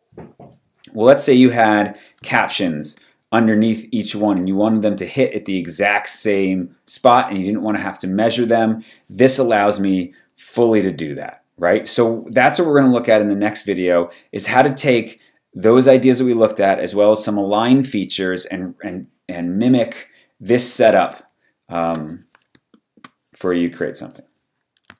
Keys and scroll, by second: 2.2 space, 20.9 space.